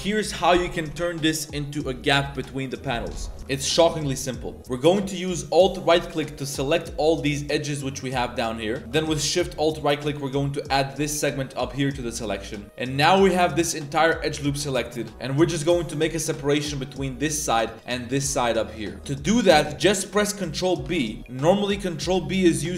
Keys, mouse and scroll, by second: 3.4 middle click, 3.4 a, 4.1-4.4 middle drag, 4.4-4.8 drag, 5.0 middle click, 6.2-6.7 alt+drag, 6.9-7.4 middle drag, 8.4-8.8 middle drag, 10.9 alt+shift+click, 11.7-13.3 middle drag, 12.6 z, 14.0 z, 14.1-15.1 middle drag, 15.7 middle click, 18.9 middle click, 18.9 z, 19.3 z, 20.9 ctrl+b.